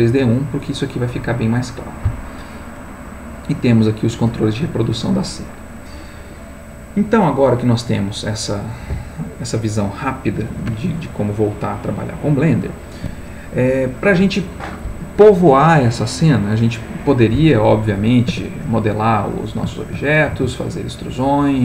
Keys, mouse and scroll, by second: 9.0 middle click, 17.6 middle click, 18.3 Tab, 19.1 click, 19.8 shift+click, 20.3 shift+e, 21.1 click.